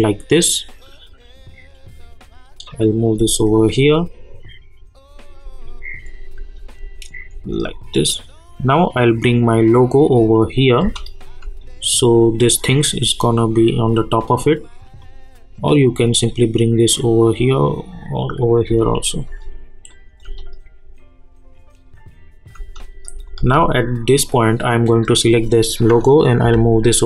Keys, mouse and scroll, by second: 3.1 space, 5.4 space, 8.7-10.8 drag, 10.8 space, 15.0-18.7 drag, 18.7 space, 19.9 click, 20.2 space, 22.5 space, 25.3 click, 25.7 click, 26.4 [.